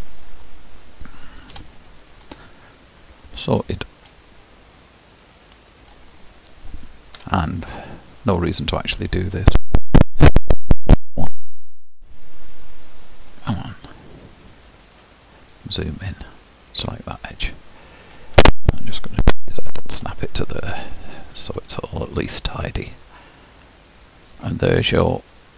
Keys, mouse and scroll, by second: 1.8 Tab, 2.2 scroll up 1, 2.5-3.2 scroll down 1, 3.2-6.3 middle drag, 6.3 click, 7.4 Tab, 8.0-11.8 middle drag, 11.8 alt+click, 12.5 alt+click, 13.8 alt+click, 14.5 alt+click, 15.1 middle click, 15.7-16.8 scroll up 3, 16.8 alt+click, 17.4-19.2 middle drag, 19.2 g, 21.8 Tab, 22.3-24.6 middle drag, 24.6-25.3 scroll down 1, 25.3-25.5 middle drag.